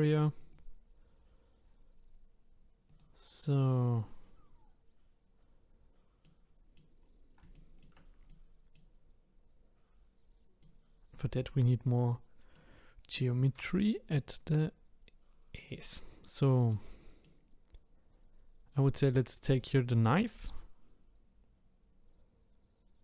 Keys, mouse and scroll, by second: 0.4 click, 2.9 click, 6.2 middle click, 7.0 scroll down 1, 7.5-11.3 shift+middle drag, 13.7 middle click, 14.3 middle click, 17.8-19.5 scroll up 1, 19.5-22.5 drag.